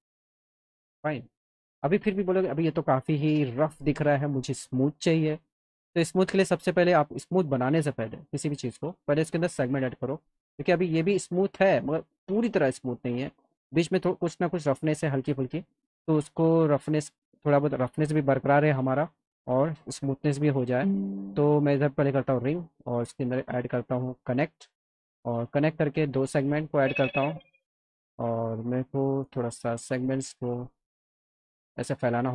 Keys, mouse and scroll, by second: 4.6 click, 5.8 click, 8.5 click, 9.2 alt+middle click, 10.7 click, 12.6 click, 17.1 alt+middle click, 20.3 alt+middle click, 22.1 click, 23.8 click, 24.5 alt+middle click, 25.7 click, 27.0-28.4 drag, 29.3 click, 31.2-32.3 drag.